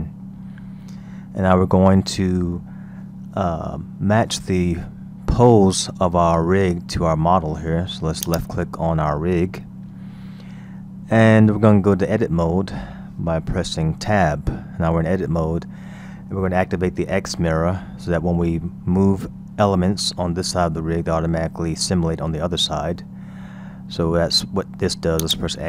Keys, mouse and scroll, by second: 0.2 KP_1, 0.7 scroll up 1, 1.6-3.2 shift+middle drag, 3.2-3.8 scroll down 1, 3.8 scroll down 1, 8.2 click, 14.2 Tab, 25.2 click.